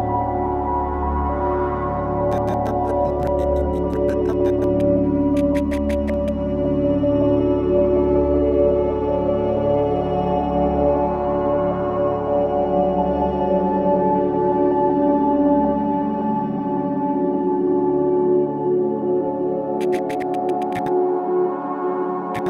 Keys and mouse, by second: 0.5 i, 1.4 click, 2.3-6.7 drag, 7.2-7.6 drag, 8.4 g, 9.7 Escape, 11.1 a, 12.9-14.1 drag, 14.1 g, 15.9-22.4 shift+drag, 15.9 typing.